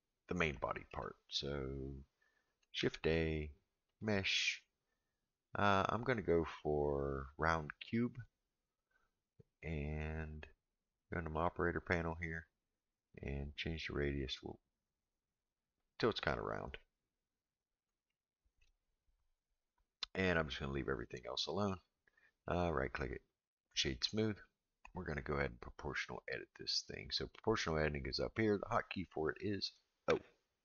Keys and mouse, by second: 0.5-0.9 shift+middle drag, 2.8 shift+a, 11.4 click, 13.0-17.1 drag, 18.1-18.6 shift+middle drag, 22.4-24.1 right drag, 30.1 o.